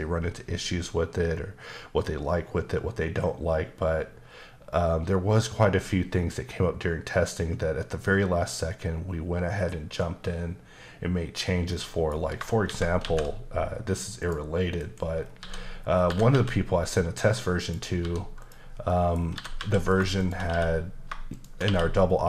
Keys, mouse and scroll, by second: 11.7 middle click, 12.6 shift+c, 14.2 click, 14.8-16.3 typing, 15.2 scroll down 2, 16.0 click, 17.6 click, 18.0 s, 18.4 click, 18.9 middle click, 19.2 scroll up 2, 19.3-20.5 typing, 19.9 click, 20.2 shift+click, 21.3 shift+click.